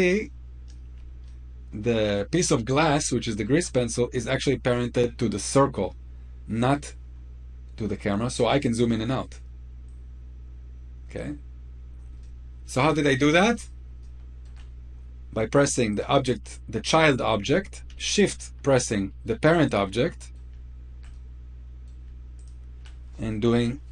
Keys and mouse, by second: 1.0-1.6 shift+middle drag, 2.8-3.2 shift+middle drag, 8.2-8.7 middle drag, 12.0-12.4 shift+middle drag, 13.9 shift+middle click, 15.7 click, 18.9 middle click, 19.4 click, 19.9 middle click, 20.8-21.6 middle drag, 22.1 shift+click.